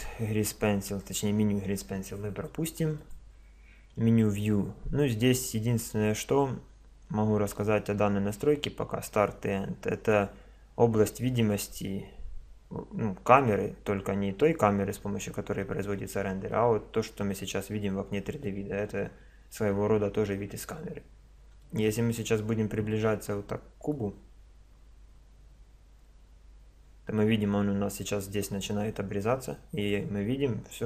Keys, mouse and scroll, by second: 3.0 click, 16.5-19.8 middle drag, 21.0-27.2 middle drag, 27.3-28.3 middle drag.